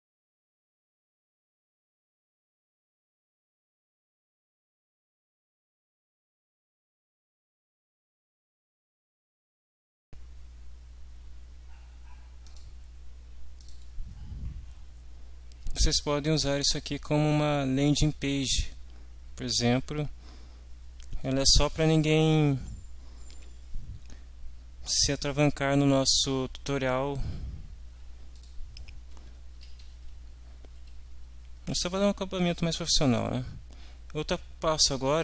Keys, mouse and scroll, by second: 0.2 click, 0.4 ctrl+a, 0.5-7.5 typing, 2.2 shift+Delete, 6.2 ctrl+Down, 6.3 Page_Up, 8.7 ctrl+alt+Right, 9.0 ctrl+v, 9.3 ctrl+s, 9.6 click, 10.0 click, 12.4 click, 13.6 click, 18.4 scroll down 2, 28.4 click, 29.6 End, 29.8 Home, 30.1 Right, 31.5 Left, 33.4 Delete.